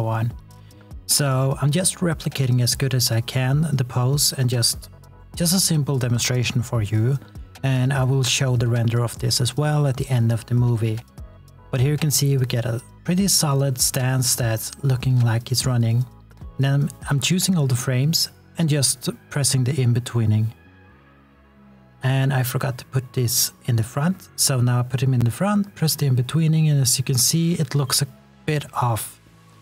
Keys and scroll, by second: 6.6 e, 12.7 s, 18.8 s, 19.9 r, 20.7 w, 23.6 space, 24.0 s, 25.5 x.